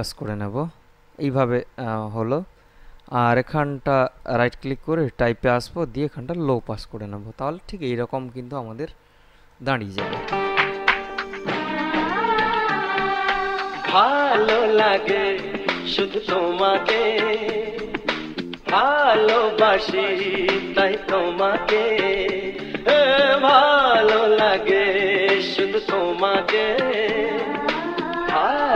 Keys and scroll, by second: 10.1 space.